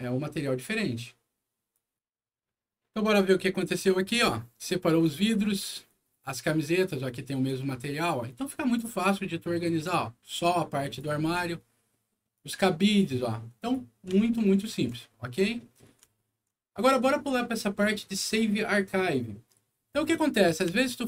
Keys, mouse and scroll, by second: 1.7 click, 3.3 click, 4.8 click, 5.8-6.8 drag, 7.4-8.7 drag, 9.6-10.9 drag, 11.2 middle click, 12.3-13.6 drag, 14.1 alt+middle click, 15.0 alt+scroll down 1, 15.5 alt+middle click, 16.1 alt+middle click, 20.8 alt+middle click.